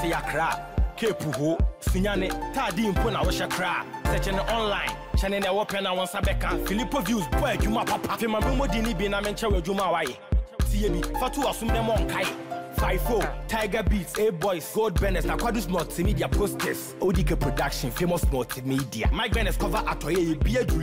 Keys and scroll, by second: 4.4 ctrl+t.